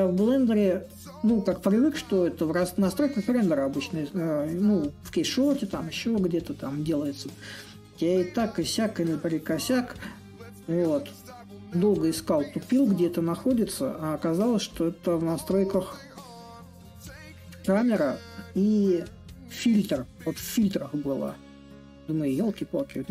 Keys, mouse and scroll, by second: 7.8-12.9 drag, 14.4-19.5 drag, 21.3-23.1 drag.